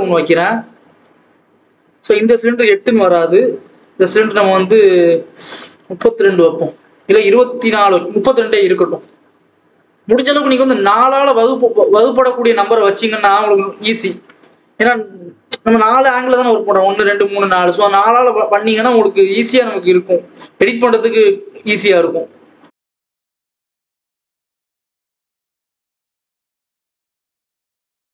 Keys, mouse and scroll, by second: 1.6 shift+a, 5.9-11.2 drag, 12.6-13.1 scroll down 1, 13.1 g, 14.9 KP_7, 15.4-18.2 scroll down 2, 18.2-18.5 scroll up 2, 18.5 click, 18.9-20.1 scroll up 4, 20.3 click, 20.7-21.7 scroll up 2, 21.7-22.6 scroll down 2, 22.6 click, 23.7 g, 24.5 click, 25.5 scroll up 1, 25.7 Tab, 25.8 s, 27.7 scroll down 2, 27.9 scroll up 1.